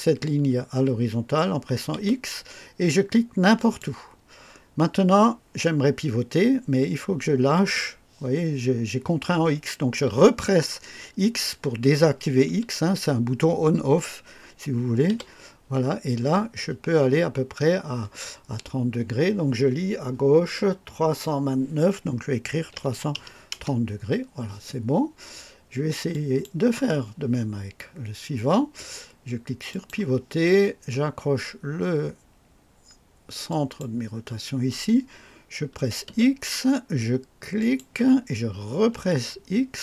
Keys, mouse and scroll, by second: 1.9 x, 3.5 click, 15.0 x, 22.6 KP_3, 22.8 KP_3, 23.1 KP_0, 23.4 Return, 23.5 Return, 26.0 click, 29.6 click, 33.4 click, 36.0 x, 37.5 click, 38.9 x.